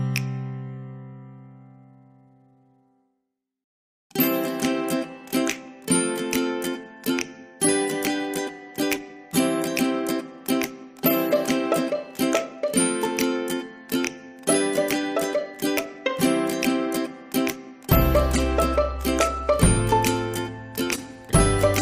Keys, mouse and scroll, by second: 1.8 click, 7.4 click, 13.1 click, 14.5 right click, 15.4 click, 18.3 click.